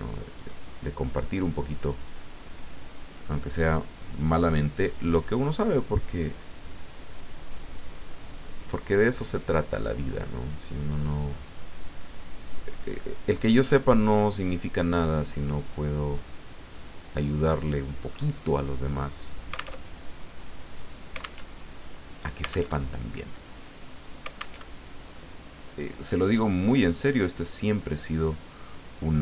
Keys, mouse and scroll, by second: 0.4 click, 1.1 click, 2.0 click, 4.4 click, 6.7-8.9 drag, 9.7 click, 10.8 click, 11.4 click, 13.4-17.4 drag, 17.8 scroll up 1, 19.8 alt+Tab, 21.4 alt+Tab, 22.7 alt+Tab, 24.6 alt+Tab, 26.7 click.